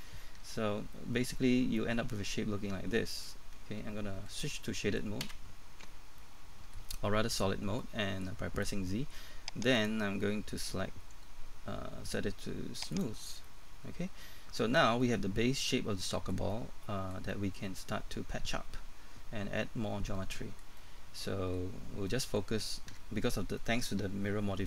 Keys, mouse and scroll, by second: 0.4 Tab, 0.9 middle click, 5.9 scroll up 1, 5.9 z, 6.2 middle click, 9.7 click, 13.4 middle click, 21.7-22.1 scroll up 1, 22.1 middle click, 22.9 Tab, 23.6 middle click.